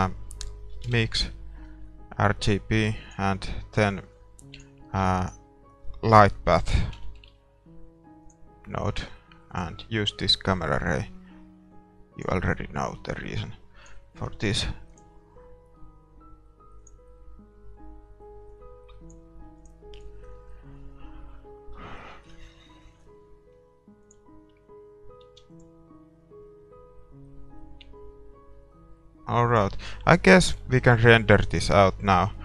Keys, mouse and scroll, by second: 3.1-6.3 drag, 5.4 shift+a, 11.2-12.5 drag, 12.6 click, 13.4-17.0 drag, 17.3-18.7 drag, 20.1-21.4 drag, 20.1 middle click, 21.9-22.2 scroll up 1, 22.2-23.6 middle drag, 23.6-25.0 scroll up 1, 24.2-25.9 drag, 25.0 middle click, 25.4 ctrl+s, 29.5-31.4 drag, 30.2-32.4 middle drag, 31.1 ctrl+s.